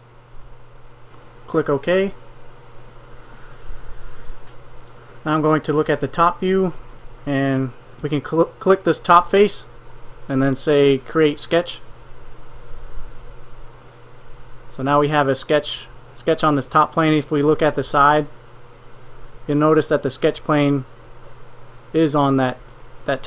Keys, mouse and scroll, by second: 12.4 middle click.